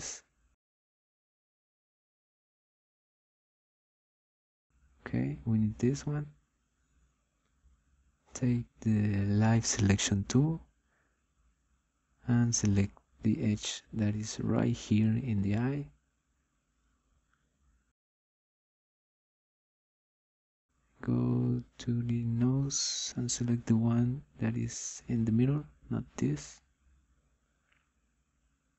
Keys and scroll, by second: 11.3 9.